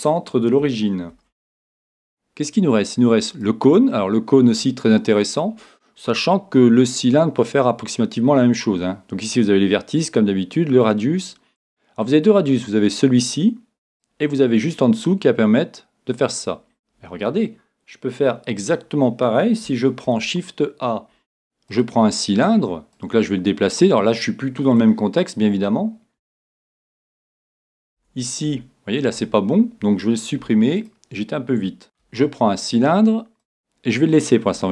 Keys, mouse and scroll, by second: 1.1 shift+a, 4.0-6.6 middle drag, 12.3-14.0 drag, 15.0-16.7 drag, 20.1 shift+a, 23.0-24.8 drag, 24.9-26.8 middle drag, 26.8 Tab, 27.3-28.0 scroll up 1, 28.0 Tab, 28.0-29.4 middle drag, 28.5 Tab, 29.2 Tab, 30.4 x, 32.0 shift+a.